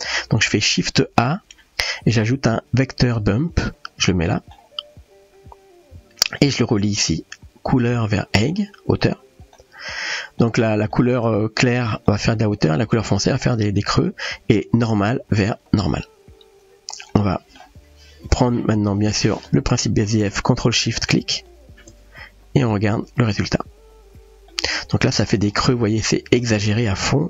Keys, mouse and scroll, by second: 1.5 shift+a, 6.5 middle click, 7.7-9.0 drag, 9.6 middle click, 10.9 middle click, 12.0 click, 13.3 middle click, 15.0-16.0 drag, 17.4 middle click, 18.3-19.3 drag, 19.4 click, 22.3-23.0 drag, 24.5-25.3 middle drag.